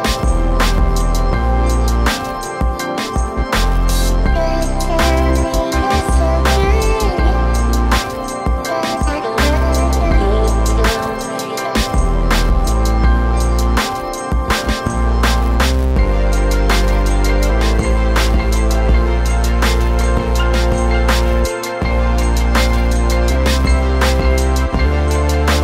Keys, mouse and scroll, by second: 1.3 click, 1.9 right click, 2.4 click, 6.1 click, 7.8 click, 10.0 click, 16.9 click, 19.3-19.7 scroll up 1, 20.1 click, 21.0-21.3 scroll up 1, 21.3-21.7 scroll down 1, 21.8 right click, 22.0 w, 23.3 scroll down 1, 23.6 click.